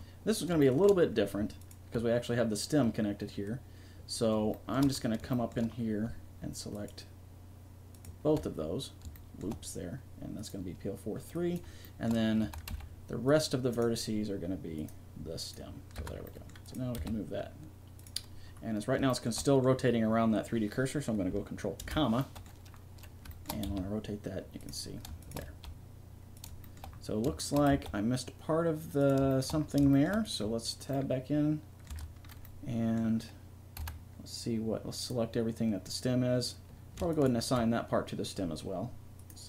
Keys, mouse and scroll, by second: 0.3-4.0 drag, 4.5 middle click, 5.3-9.6 middle drag, 10.4 middle click, 11.8-13.5 middle drag, 12.4 a, 12.7 c, 14.8 click, 16.0 Tab, 16.6 right click, 16.9 r, 21.8 ctrl+,, 23.6 r, 25.5 r, 27.7 r, 30.2 click, 31.7 right click, 31.9 Tab, 33.8 a, 37.1-38.9 drag.